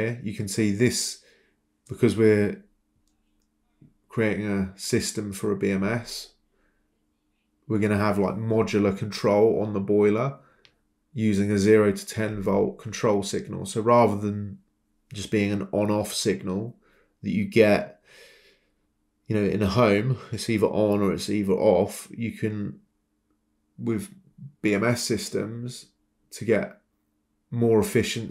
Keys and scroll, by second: 2.4 Escape, 2.4 typing, 3.9 Escape, 11.6 typing, 12.1 Return, 16.4 Escape, 26.9 typing.